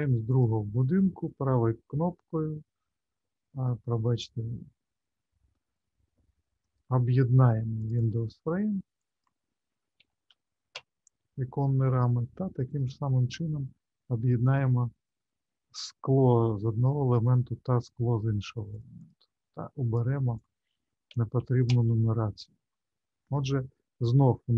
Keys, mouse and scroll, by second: 0.2 shift+click, 1.2 right click, 5.5 right click, 7.8 click, 8.0 click, 12.6 click, 14.4 shift+click, 16.5 right click, 18.7 click, 19.0 click, 24.2-24.5 scroll down 3.